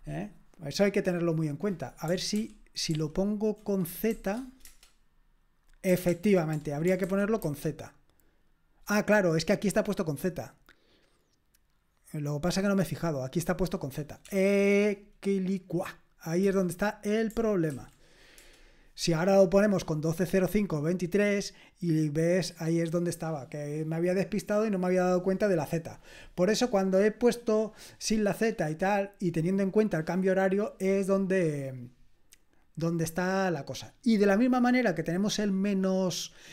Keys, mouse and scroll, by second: 2.3 ctrl+o, 2.9 ctrl+p, 4.1 shift+z, 4.6 Return, 6.1 ctrl+p, 7.0 alt+b, 7.5 alt+b, 11.0-14.2 drag, 14.2 BackSpace, 14.4 BackSpace, 16.4 typing, 17.5-18.5 typing, 22.2 click, 23.1 middle click.